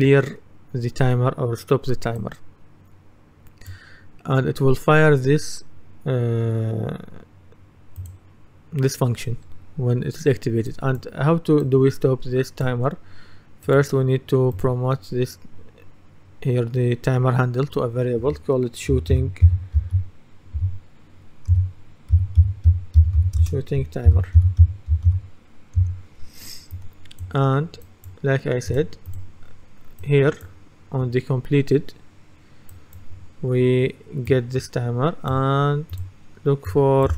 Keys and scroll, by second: 18.9-25.6 typing, 25.8 Return.